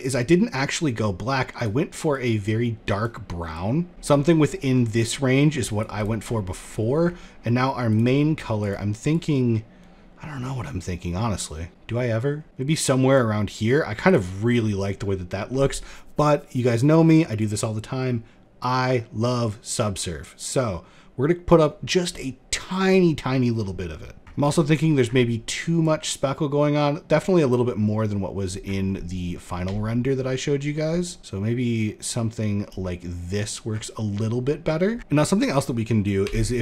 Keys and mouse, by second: 5.5 click, 6.1 middle click, 7.4 click, 13.6 click, 14.5 middle click, 16.9-21.0 drag, 25.3-27.1 drag, 29.2 shift+drag, 29.3 shift+middle click, 31.0-32.3 drag, 34.9 middle click, 35.7 g, 36.5 click.